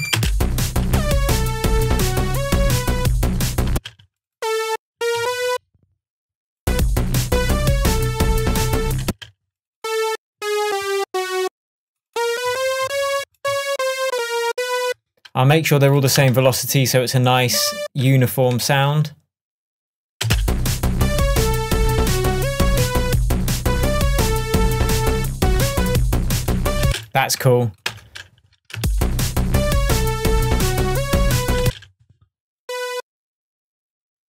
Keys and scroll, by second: 0.0 BackSpace, 0.2 space, 3.7 space, 5.0 Up, 9.1 space, 10.4 Down, 12.4 Up, 16.4 super+a, 18.7 shift+super+Tab, 19.2 shift+Tab, 20.3 space, 26.9 space, 28.0 BackSpace, 31.7 space.